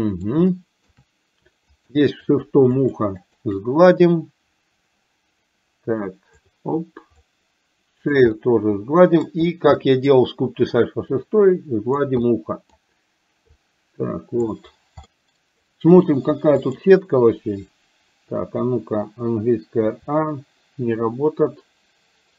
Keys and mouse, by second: 0.6 shift+middle click, 1.8 shift+click, 2.4 shift+click, 2.8 shift+click, 3.2 shift+click, 4.1-6.4 drag, 7.3 click, 8.4 middle click, 9.8 middle click, 10.9-12.1 drag, 12.3 middle click, 13.6-14.6 drag, 15.2 middle click, 19.9 a.